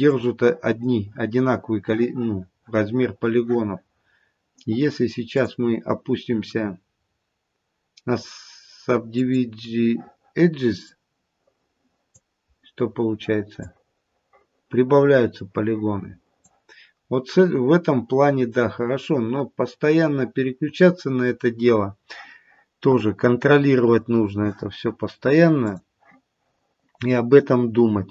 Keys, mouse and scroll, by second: 5.2 click, 10.7 click, 12.5-13.5 scroll up 4, 13.5 click, 16.9-18.1 scroll down 4, 18.1-21.6 scroll down 7, 23.6-26.1 scroll down 2, 26.1 click.